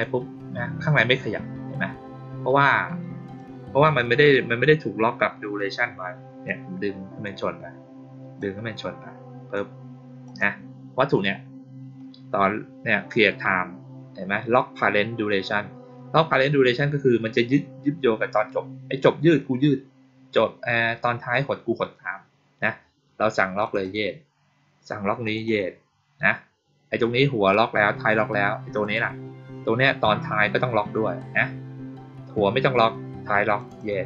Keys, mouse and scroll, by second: 3.3-4.5 drag, 6.4 click, 8.3-9.5 drag, 10.2 click, 23.5 click, 23.7 click, 25.2 click, 25.4 click, 28.7 click, 33.5 click, 33.7 click.